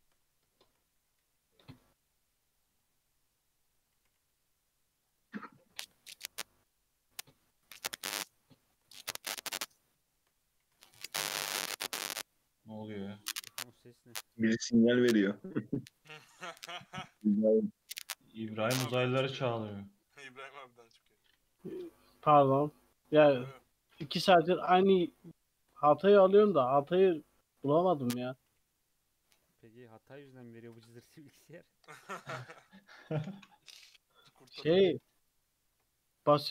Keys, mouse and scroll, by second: 0.2-0.5 scroll down 2, 0.5-1.0 shift+middle drag, 1.0 e, 2.8-3.6 scroll up 1, 3.6 click, 3.9 g, 5.8 shift+middle click, 6.1 ctrl+r, 7.4-8.5 right drag, 8.5 shift+middle click, 9.3 click, 9.6 shift+click, 10.6 e, 13.0 1, 13.2 click, 13.5 g, 15.1-17.4 shift+middle drag, 17.4 ctrl+r, 19.3 click, 20.1 g, 21.7 ctrl+r, 22.5 click, 22.9 g, 24.3 shift+middle drag, 24.5 2, 25.0 click, 25.4 shift+click, 25.8 e, 28.0 1, 28.1 click, 28.4 g, 30.0-30.6 scroll up 1, 30.6 ctrl+r, 32.5 s, 34.3 s, 35.6 ctrl+r.